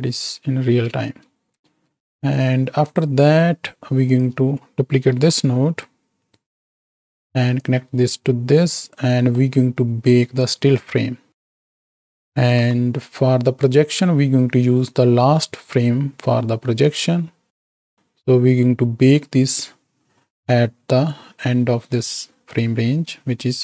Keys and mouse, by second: 0.2 space, 1.1 space, 1.7 space, 2.9 drag, 5.1 shift+d, 7.6-8.8 drag, 9.2 click, 9.2 right click, 12.5 KP_7, 16.8-17.9 drag.